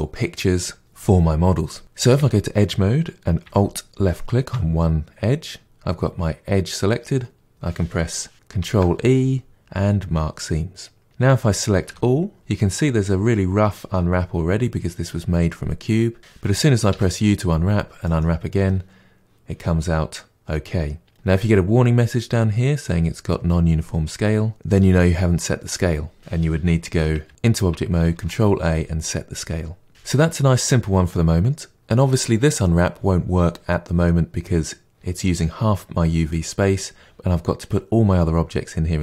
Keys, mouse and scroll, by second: 2.1 2, 4.0 alt+click, 11.0 ctrl+e, 11.8 a, 18.1 u, 27.2 Tab, 29.9 Tab.